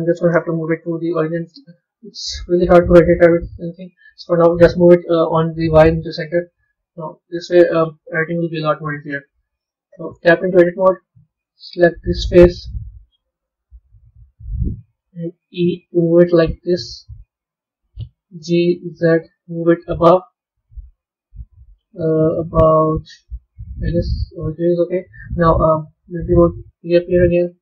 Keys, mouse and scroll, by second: 0.9 click, 2.5-5.6 drag, 5.8 KP_1, 6.4 scroll down 1, 6.4-8.2 scroll up 6, 8.2 KP_3, 9.0 KP_1, 10.1 b, 10.6-12.1 middle drag, 12.1 click, 13.5 KP_3, 14.1 KP_1, 26.3 click, 26.9-27.6 scroll down 2.